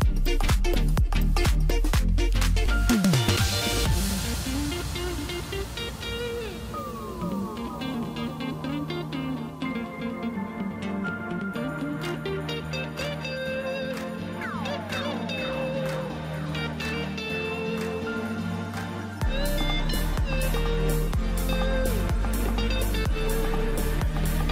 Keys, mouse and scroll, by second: 2.3-2.9 scroll up 2, 2.9-4.0 middle drag, 4.0 click, 4.2 click, 4.6 scroll down 2, 4.8-6.3 middle drag, 6.3 e, 7.9 alt+s, 10.5 KP_7, 12.3 click, 13.5-16.6 drag, 16.6 scroll down 2, 16.8-18.6 middle drag, 18.6-18.9 scroll up 1, 18.9 Tab, 19.3-21.5 middle drag, 21.5-22.2 scroll down 2, 22.8 click.